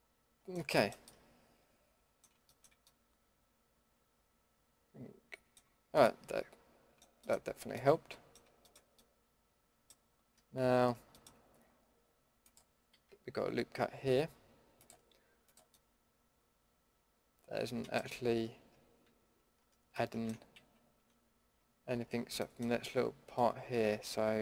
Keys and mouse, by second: 2.9-4.9 middle drag, 5.6-8.6 middle drag, 12.9 a, 19.1 ctrl+x, 20.6 ctrl+z, 23.5 middle click.